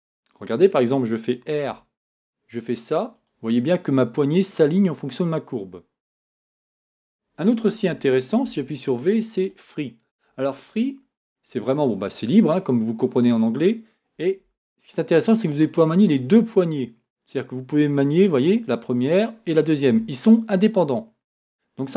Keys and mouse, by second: 1.7 r, 6.7 r, 8.4 v, 14.4 r, 19.9 r.